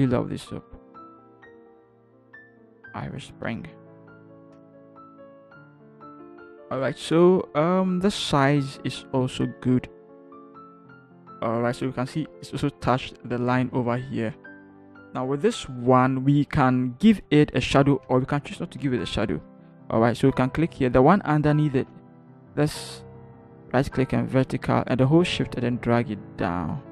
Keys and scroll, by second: 2.3 ctrl+shift+h, 3.3 ctrl+shift+Down, 3.8 ctrl+shift+Down, 4.3 ctrl+shift+Down, 4.5 ctrl+shift+Return, 5.4 Down, 6.7 ctrl+h, 10.8 ctrl+h, 16.6 ctrl+h, 18.8 ctrl+j, 22.2 ctrl+t.